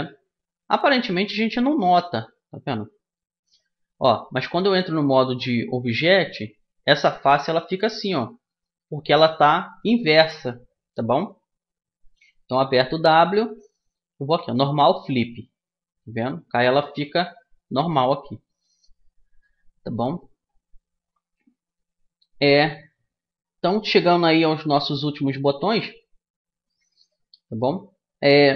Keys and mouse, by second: 2.1 middle click, 2.7 Tab, 3.5-5.1 middle drag, 6.6 right click, 7.5 middle click, 10.6 Tab, 12.6 w, 16.1 a, 16.5 Tab, 17.6-22.1 middle drag, 26.7-28.5 middle drag.